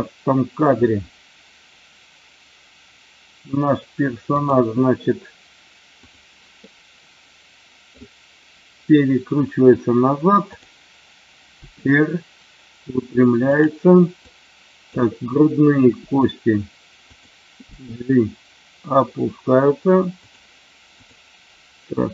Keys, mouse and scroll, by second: 4.3 click, 6.0 click, 6.7-7.8 middle drag, 10.4 click, 11.7 r, 13.4 click, 14.2 click, 15.7 r, 17.1 click, 17.6 g, 20.3 click, 20.9 click.